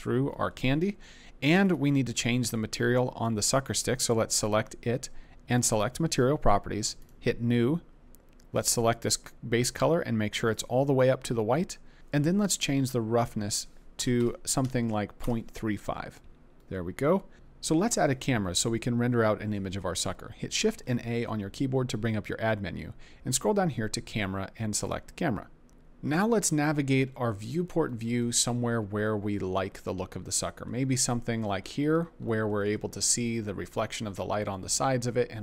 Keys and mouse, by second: 1.6 click, 5.5 click, 7.0 click, 8.5 click, 13.4-15.2 drag, 20.5 shift+a, 32.6 middle click.